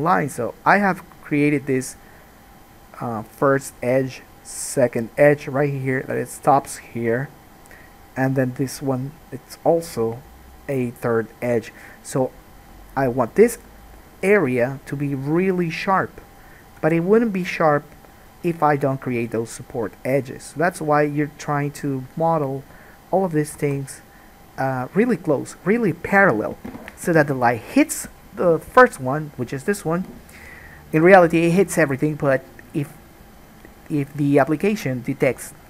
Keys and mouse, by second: 13.4 middle click, 13.5-14.8 drag, 14.8 shift+middle click, 15.5 shift+click, 15.7 shift+middle click, 15.8 shift+click, 16.7 shift+middle click, 16.8-35.6 shift+drag, 23.9 alt+a.